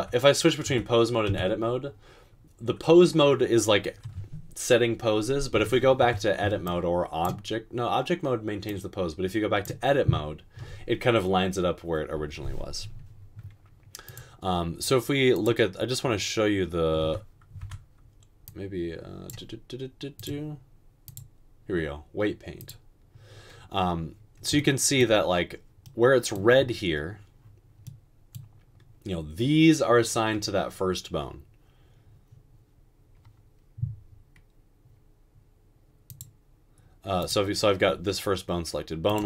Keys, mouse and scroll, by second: 0.6 Tab, 1.3 Tab, 6.1 Tab, 17.1 Tab, 17.6 Tab.